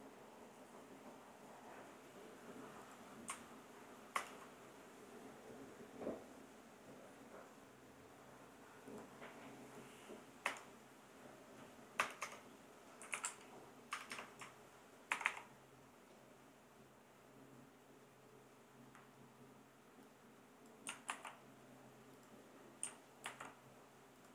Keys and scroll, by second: 4.1 ctrl+Return, 10.4 Return, 12.0 Return, 12.8-13.6 typing, 13.9 Return, 15.1 shift+4, 21.1 super+c, 23.2 super+v.